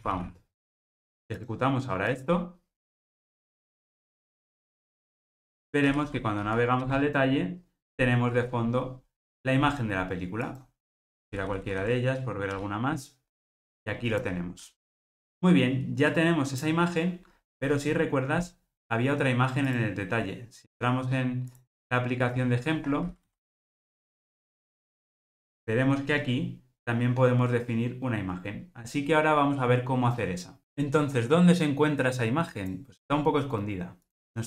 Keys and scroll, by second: 1.5 ctrl+r.